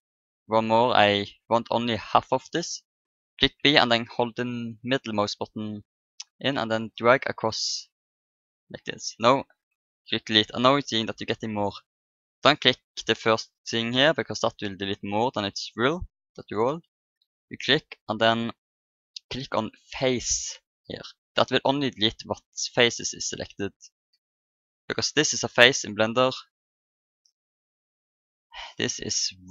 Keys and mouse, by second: 0.7-4.5 middle drag, 3.4 b, 8.1 middle click, 9.5 Delete, 13.5 Delete, 15.5 ctrl+z, 17.0 Delete, 25.1-26.8 right drag, 26.9-28.9 drag, 29.4-29.5 right drag.